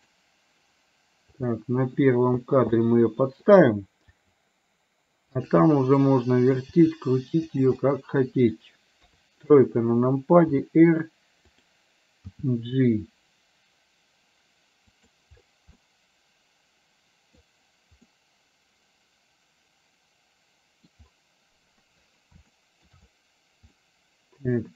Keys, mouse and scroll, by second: 1.6 click, 2.9 middle click, 4.1 g, 5.6 middle click, 6.7 g, 7.9 middle click, 9.0 KP_3, 10.6 r, 12.4 g, 15.9-17.5 middle drag, 18.1-20.9 middle drag, 20.9 scroll down 1, 22.5 scroll up 1, 22.7 shift+middle click, 23.8-24.7 middle drag.